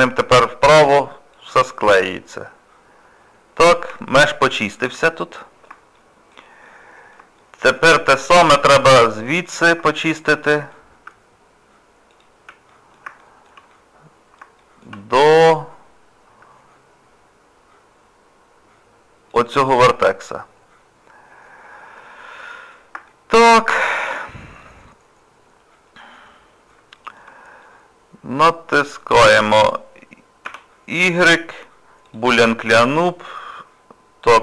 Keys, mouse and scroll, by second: 1.8 middle click, 4.1 shift+middle click, 5.0 middle click, 6.0 shift+middle click, 6.7 middle click, 7.4 shift+middle click, 7.9 middle click, 9.4 click, 9.8 shift+middle click, 10.4 middle click, 12.1 ctrl+click, 12.7 middle click, 13.2 shift+middle click, 14.6 shift+middle click, 15.0 scroll up 2, 15.4 scroll down 1, 15.5 scroll up 1, 19.3 ctrl+click, 20.0 scroll down 1, 21.3 scroll up 1, 21.3-21.7 scroll down 2, 22.1 scroll up 1, 22.2 scroll down 1, 22.4 middle click, 23.1 shift+middle click, 23.7 middle click, 26.0 scroll up 2, 27.0 shift+middle click, 27.6 middle click, 30.5 y.